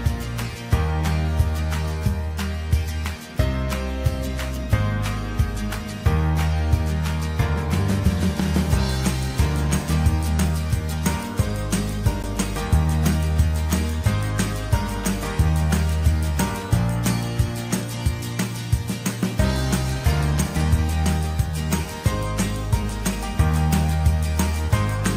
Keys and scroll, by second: 24.6 ctrl+t.